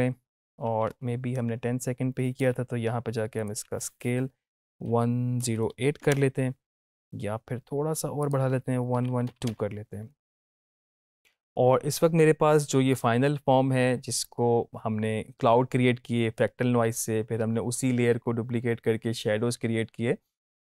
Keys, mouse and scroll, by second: 8.1 click, 10.7 click.